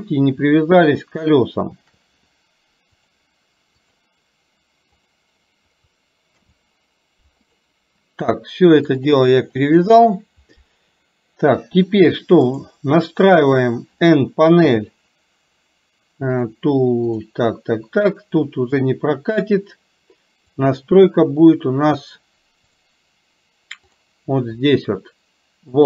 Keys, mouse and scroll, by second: 3.2 click, 5.1 click, 6.5 ctrl+p, 9.0 click, 9.6 click, 12.6 click, 14.7 n, 17.2 click, 22.7 click, 23.8 click.